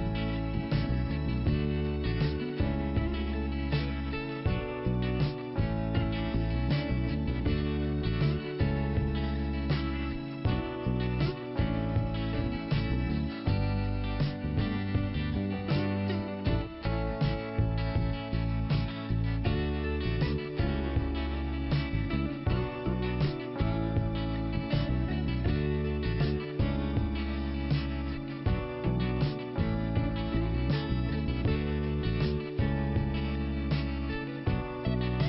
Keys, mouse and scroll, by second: 1.0 click, 2.0 click, 4.0 click, 5.0 click, 6.4 click, 7.6 click, 9.4 click, 10.7 click, 12.1 click, 13.4 click, 16.5 click, 17.4 middle click, 18.7 click, 24.9 middle click, 25.7 middle click, 25.9 middle click, 31.0 middle click, 32.2 click.